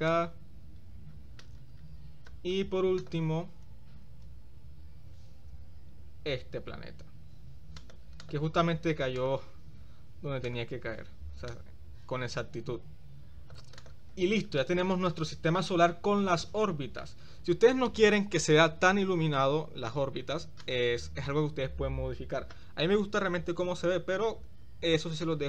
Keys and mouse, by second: 3.0 click, 4.3 shift+d, 5.4 s, 8.4 click, 9.4 click, 10.6 click, 11.6-13.8 drag, 13.9 click, 14.8-15.8 middle drag, 16.6-17.3 shift+middle drag, 20.7 click.